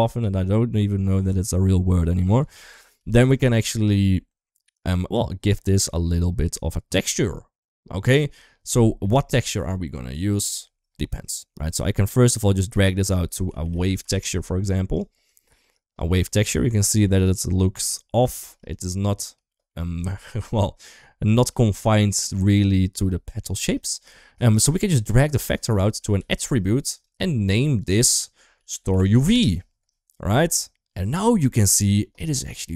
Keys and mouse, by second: 0.7 middle drag, 1.1 shift+middle drag, 1.4-1.7 middle drag, 2.5 KP_1, 2.7 KP_3, 4.8 click, 5.7 shift+middle click, 12.6-14.7 drag, 15.2 shift+middle click, 16.0-16.5 middle drag, 16.8 shift+middle click, 17.1 middle drag, 18.1 shift+middle drag, 18.5 middle drag, 19.4 shift+middle click, 19.8 middle click, 20.3 middle drag, 21.1 shift+middle drag, 24.9-26.7 drag, 27.6-29.1 drag, 31.8-32.7 middle drag.